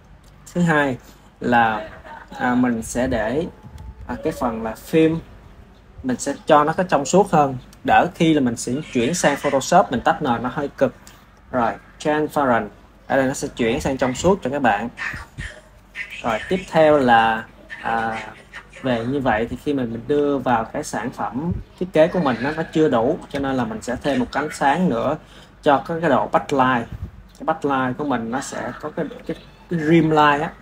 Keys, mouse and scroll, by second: 17.4-21.6 ctrl+middle drag, 21.6 ctrl+s, 22.6-24.1 ctrl+middle drag, 24.1 shift+a, 29.0 KP_3.